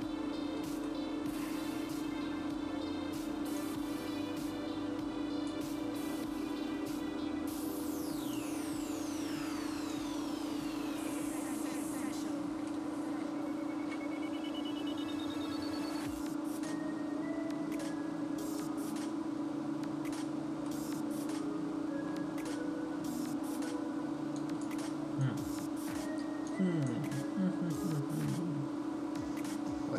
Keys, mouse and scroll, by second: 0.4-0.8 scroll down 3, 0.9 shift+middle click, 1.9-2.6 scroll up 3, 3.9 click, 10.0 click, 11.0 middle click, 12.0-12.9 scroll down 1, 12.9 shift+middle click, 12.9 scroll down 1, 16.8 click, 20.7 middle click, 24.5 click.